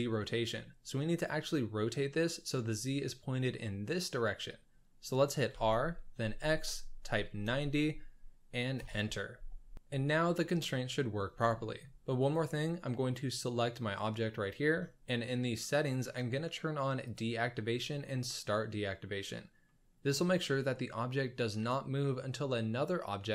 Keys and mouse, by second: 0.5 middle drag, 0.7 drag, 1.0 middle drag, 5.5 r, 10.8 middle drag, 11.5 shift+middle drag, 12.3 middle click, 17.0 click, 19.6-20.1 middle drag.